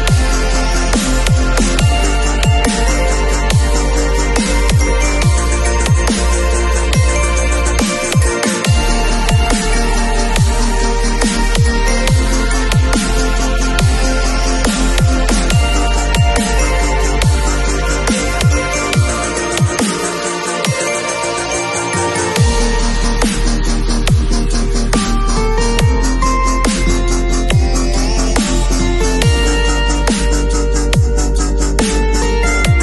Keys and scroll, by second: 1.0 ], 3.3 [, 5.2 ], 7.6 v, 8.6 space.